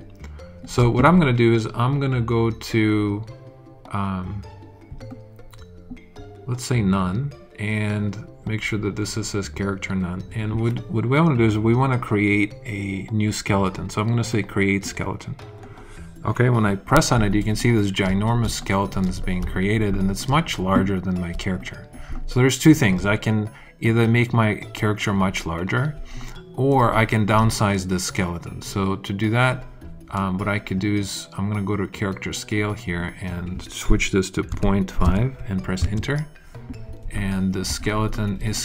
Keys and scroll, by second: 34.4 ., 35.0 5, 35.7 Return.